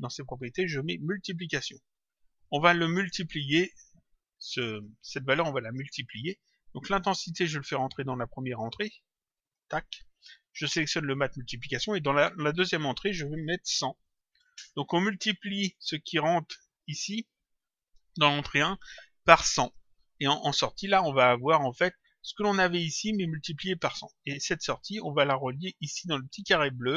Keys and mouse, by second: 0.8 click, 2.2 click, 4.7 click, 7.4 click, 10.7 click, 12.6 click, 15.6 click, 24.7 click.